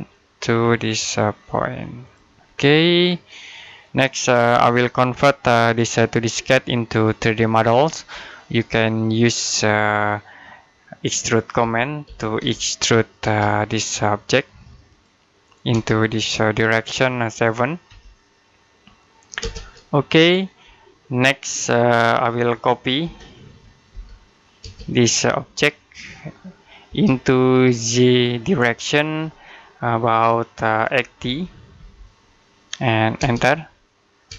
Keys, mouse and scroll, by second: 0.2-1.9 scroll up 1, 1.9 click, 2.4-3.1 scroll down 1, 3.1 middle click, 3.3 scroll up 1, 4.3 typing, 4.7 shift+middle click, 8.2 middle click, 11.2-13.1 typing, 14.7 click, 15.5 space, 17.7 7, 19.2 space, 21.9 middle click, 22.9-24.5 typing, 25.8 click, 26.7 space, 27.3 click, 31.1-31.6 typing, 33.0 space.